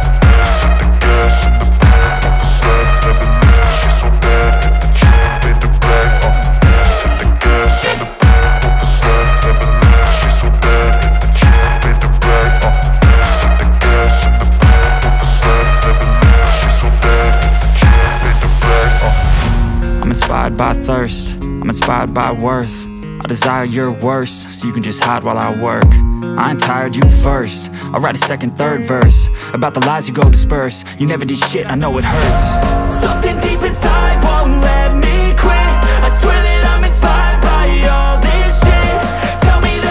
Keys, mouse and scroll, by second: 0.8 ctrl+shift+click, 2.6 ctrl+alt+shift+e, 3.2 click, 4.5 z, 4.9 click, 5.7 space, 5.9 click, 6.3 space, 7.1 click, 9.9 space, 10.1 click, 10.7 space, 10.8 click, 11.2 space, 12.2 click, 17.1 click, 21.7 v, 22.1 click, 23.9 ctrl+t, 24.4 alt+click, 27.8 shift+space, 28.0 click, 30.8 space, 32.8-39.9 typing, 35.8 ctrl+z, 37.0 click, 37.5 click, 38.0 click, 38.8 click, 39.2 click, 39.5 click.